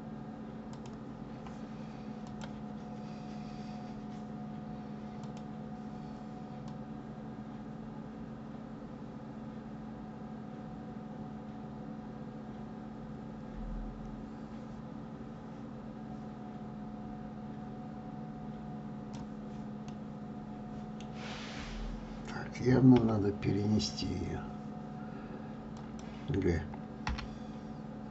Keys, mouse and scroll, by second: 2.3 click, 5.5 click, 7.1 click, 20.0-22.8 middle drag, 22.8 KP_7, 24.0-24.6 scroll down 8, 26.1 click, 27.2 g.